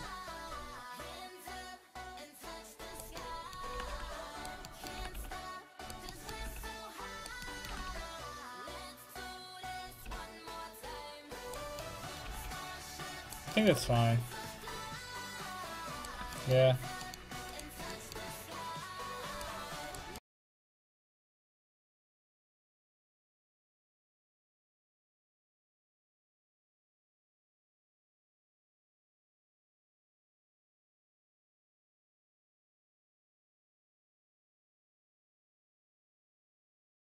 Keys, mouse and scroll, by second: 1.0 r, 3.2-8.7 middle drag, 3.7 r, 5.0 r, 7.5 r, 7.7 r, 10.1 r, 12.3 r, 13.8 r, 17.5 right click, 22.2-23.2 drag, 22.2-23.7 right drag, 23.7 click, 24.3-25.7 right drag, 25.7 w, 27.4-30.1 right drag, 27.8 w, 29.6 w.